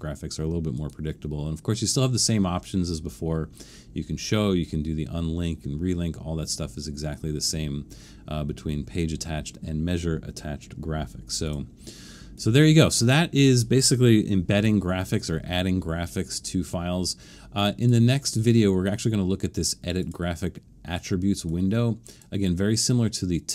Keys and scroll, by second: 14.6 super+-, 15.1 super+-.